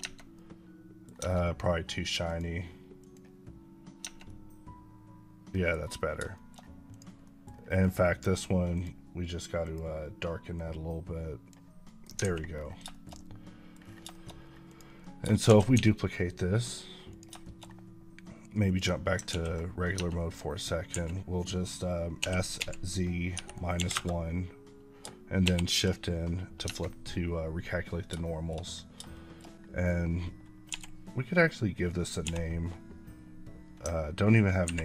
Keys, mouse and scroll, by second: 0.2 middle click, 1.0 Tab, 2.1 click, 3.6 click, 3.9 Tab, 4.1 middle click, 5.6 scroll down 1, 6.3 shift+middle click, 6.4-6.8 shift+scroll up 2, 6.8-7.1 drag, 7.1-8.3 middle drag, 8.3 scroll up 5, 8.6-11.7 drag, 11.7 middle drag, 12.0-12.5 alt+scroll down 2, 12.2 alt+a, 12.8 shift+middle click, 14.0 shift+middle click, 14.2 scroll up 2, 14.5 click, 14.9 middle click, 15.3 shift+d, 15.6 x, 17.0 click, 17.3 shift+middle click, 18.5 click, 19.5 s, 19.7 scroll up 1, 19.8 Tab, 22.8 z, 23.6 KP_1, 23.8 KP_Enter, 25.3 shift+n, 27.0 Tab, 28.1 shift+middle click, 28.5 scroll down 1, 29.0 shift+middle click, 29.3 scroll down 1, 31.3 n, 33.1 n.